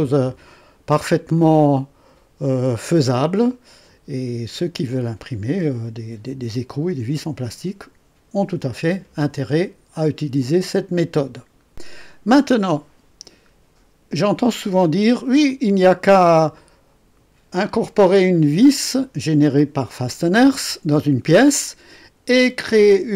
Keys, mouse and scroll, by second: 1.3-2.8 drag, 3.4 right click, 13.1 scroll down 2, 13.8 scroll up 2, 14.4 right click, 15.5-16.3 drag, 16.5-18.8 drag.